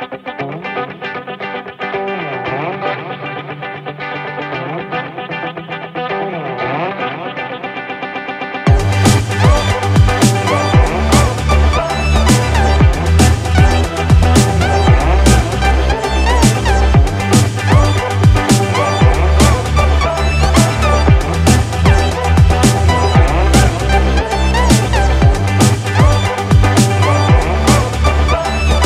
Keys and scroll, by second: 13.3 ctrl+-, 17.5 Up, 20.1 ctrl+-, 21.0 ctrl+0, 21.9 ctrl+-, 22.8 ctrl+=, 24.9 ctrl+z.